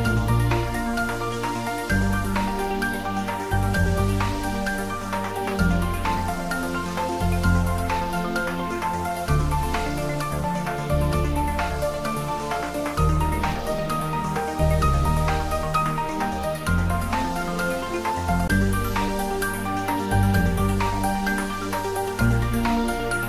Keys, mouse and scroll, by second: 0.7 click, 5.7 click, 8.5-9.2 scroll down 1, 10.9-12.2 scroll down 1, 13.4 click, 19.5 click, 21.8 click.